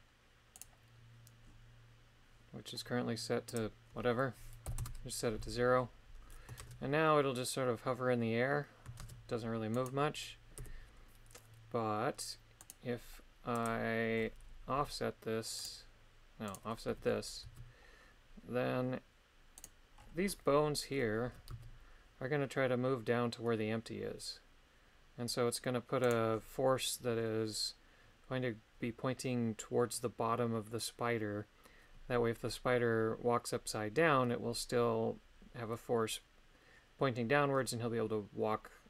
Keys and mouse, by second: 0.6 right click, 3.6-4.8 drag, 6.6 shift+space, 9.0 shift+space, 9.8 right click, 10.6 KP_3, 12.6 right click, 13.5 click, 14.8 g, 15.6 right click, 16.5 right click, 16.9 g, 17.4 z, 21.3 g, 21.5 z, 26.0 right click.